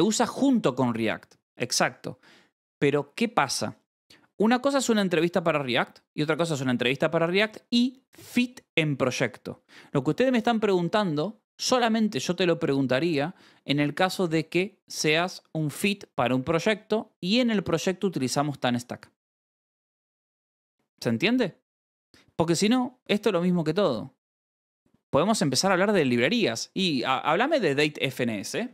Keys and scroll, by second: 27.5 Escape, 28.2 k, 28.6 ctrl+s.